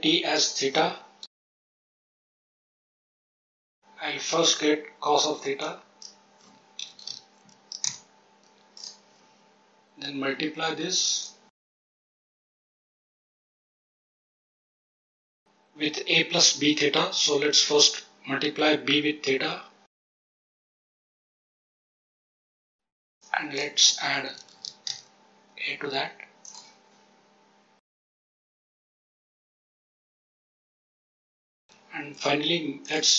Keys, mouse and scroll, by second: 0.3-1.6 drag, 2.2-2.6 scroll down 1, 2.6 click, 3.3 click, 5.5-7.8 drag, 8.7 click, 11.1 click, 12.5 click, 13.4 click, 13.8 click, 14.9-20.4 drag, 20.8 click, 21.3-21.8 drag, 23.1-24.8 drag, 24.5 d, 26.4 click, 27.8 click, 28.6 shift+right click, 29.0 g, 29.4 shift+right click, 29.7 g, 31.2 click, 31.3 click, 31.6 g.